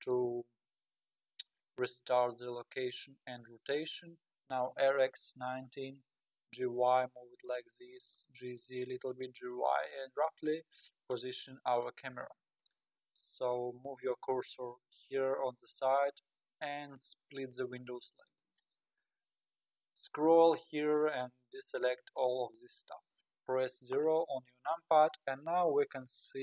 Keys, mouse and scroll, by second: 0.4-0.8 scroll up 4, 0.8-1.6 scroll down 9, 1.6 scroll up 5, 2.1-2.4 scroll down 3, 3.1-4.6 middle drag, 4.6 r, 6.4 g, 8.1 g, 9.0 g, 10.3-12.1 middle drag, 12.1-12.5 scroll down 3, 15.9-19.7 drag, 19.7-21.0 scroll down 12, 21.0-21.5 drag, 23.9 KP_0, 23.9 KP_0.